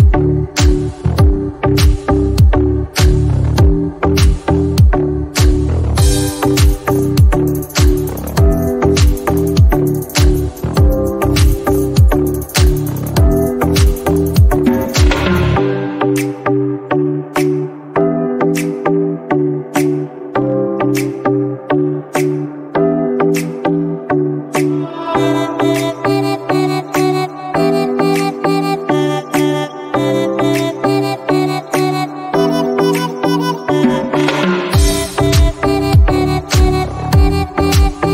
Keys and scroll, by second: 10.9 y, 11.9 BackSpace, 12.4 y, 14.5 r, 14.6 space, 14.9 l, 20.3 c, 22.5 b, 22.8 r, 23.4 Return.